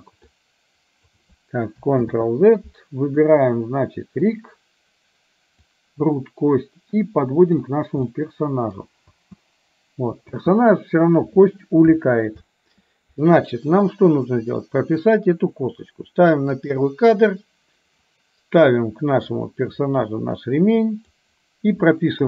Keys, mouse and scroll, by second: 0.4-1.2 drag, 2.1 ctrl+z, 3.3 middle drag, 4.3 click, 5.7-7.8 drag, 8.3-9.2 middle drag, 9.2 space, 10.4 space, 16.7 click, 18.2-21.2 drag.